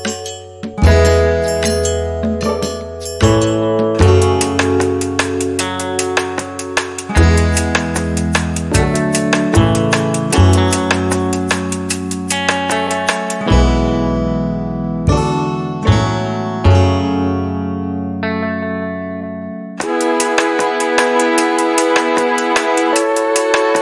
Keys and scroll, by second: 3.7 space, 5.2 Delete, 8.2-9.8 typing, 11.9 5, 12.3 Return, 16.0 b, 22.8 space.